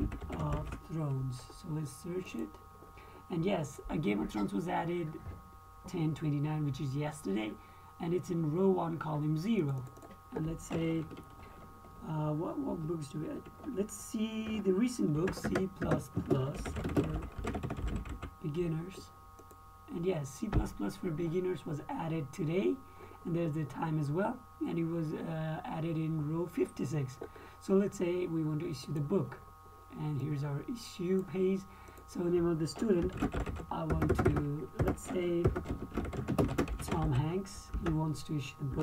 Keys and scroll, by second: 0.0-1.5 typing, 15.6-19.0 typing, 15.9 KP_Add, 16.2 KP_Add, 33.3-38.0 typing, 38.1 Tab.